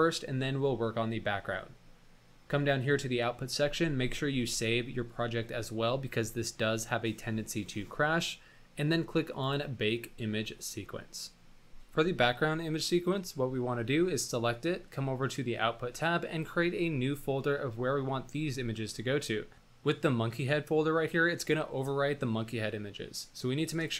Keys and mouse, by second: 4.3 ctrl+s, 23.9 click.